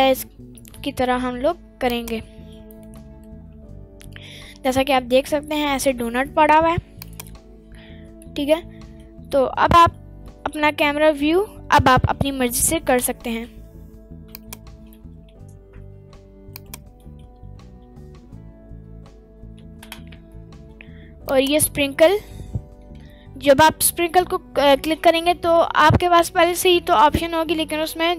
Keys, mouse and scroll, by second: 2.2 drag, 2.5-4.5 middle drag, 4.5-5.0 scroll down 2, 4.9-5.6 middle drag, 5.8 scroll down 2, 6.0 middle click, 7.0 click, 8.4-9.0 middle drag, 9.9-10.5 middle drag, 10.7-11.0 scroll up 2, 11.0 middle click, 14.3 click, 15.2 g, 16.5 click, 17.0 middle click, 17.4 scroll down 1, 18.1-19.0 scroll down 1, 19.0-19.5 scroll down 1, 21.2 click.